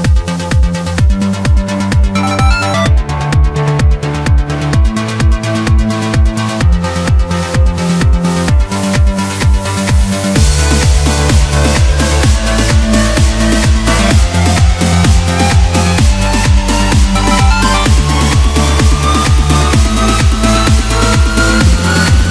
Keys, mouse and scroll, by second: 1.0 KP_7, 1.9-2.7 scroll up 7, 2.7 3, 3.1 click, 4.1 KP_Add, 4.5 KP_Add, 5.4 scroll down 1, 5.7 middle click, 6.3-7.6 scroll down 9, 7.6 KP_Decimal, 8.5 x, 9.5 scroll down 1, 9.7 middle click, 10.5 scroll down 1, 10.8 Tab, 11.4 KP_1, 11.8 ctrl+KP_2, 12.3 ctrl+KP_2, 12.4 ctrl+KP_2, 13.0-14.7 scroll down 7, 14.7-17.0 drag, 17.0 KP_Divide, 17.7 Tab, 18.1 scroll down 1, 18.4-18.9 middle drag, 18.9 click, 19.6 KP_1, 20.5 s.